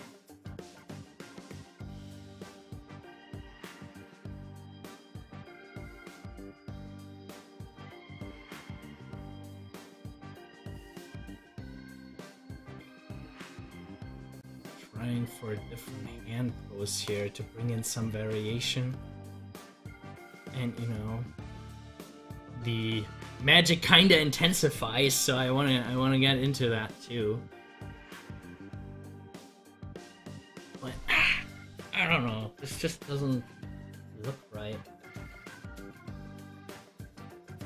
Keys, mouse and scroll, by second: 1.0 ctrl+z, 3.9 ctrl+z, 9.2 ctrl+z, 25.9 click, 26.0 double click, 36.1 double click, 36.1 click, 37.2 Delete.